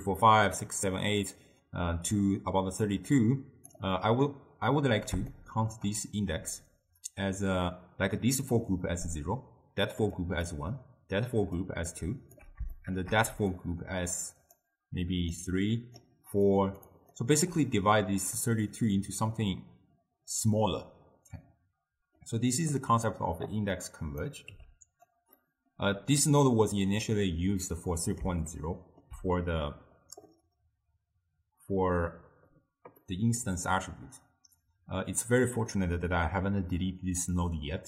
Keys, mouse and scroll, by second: 0.0-4.8 typing, 2.3 click, 3.2 click, 5.4-6.3 shift+middle drag, 6.3-10.2 d, 10.3 click, 10.5-11.7 d, 11.8 click, 12.4 d, 12.8 shift+middle click, 13.3 d, 13.6-14.6 drag, 14.6-15.3 d, 15.5-16.1 drag, 16.1-16.5 d, 16.6 click, 16.9 d, 17.0 click, 17.2 d, 21.4-22.8 middle drag, 22.8-24.6 drag, 24.6 g, 25.5 middle click, 26.3 click, 27.9-31.7 middle drag, 33.1-36.2 middle drag, 37.4-37.8 middle drag.